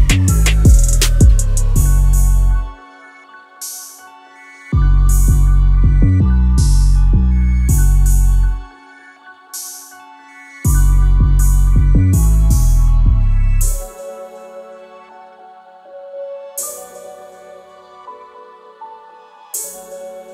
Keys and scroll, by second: 11.8 Escape, 19.3 Escape.